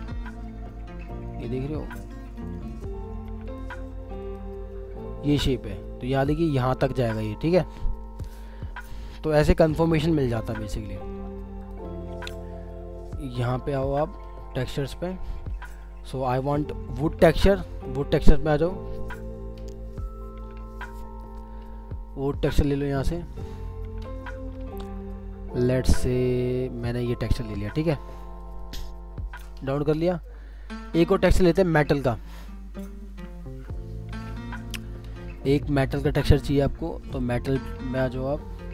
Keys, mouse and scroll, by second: 2.3 ctrl+click, 2.5 ctrl+double click, 4.2 shift+click, 5.0 shift+scroll down 2, 8.2 scroll down 1, 21.0-21.7 scroll down 1, 26.1 scroll up 1.